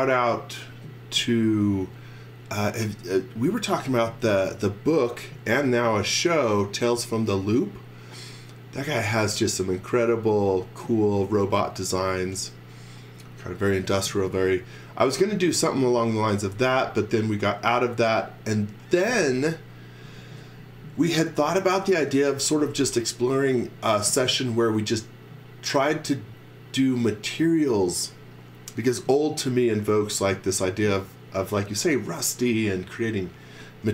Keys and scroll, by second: 0.6 x, 1.2 z, 19.1 x, 20.0 z.